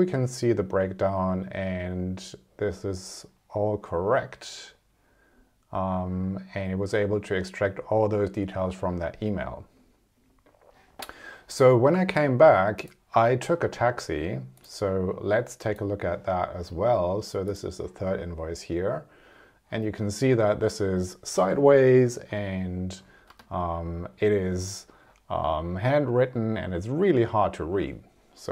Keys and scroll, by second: 23.2 space, 27.7 space.